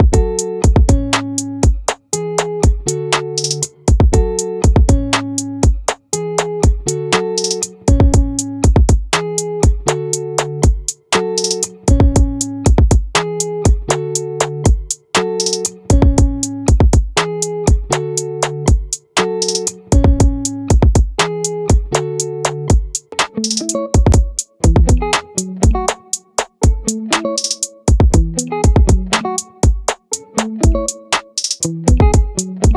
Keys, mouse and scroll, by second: 3.5 click, 5.9 middle click, 8.3-9.7 right drag, 14.7 right click, 15.3 middle click, 18.1-32.7 drag.